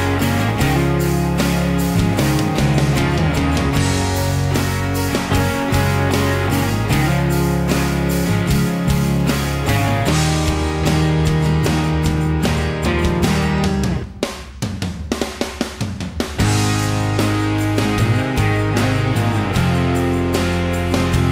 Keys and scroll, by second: 4.7 m, 8.1 p, 9.3 Escape, 13.2-14.8 typing, 16.5-21.3 typing.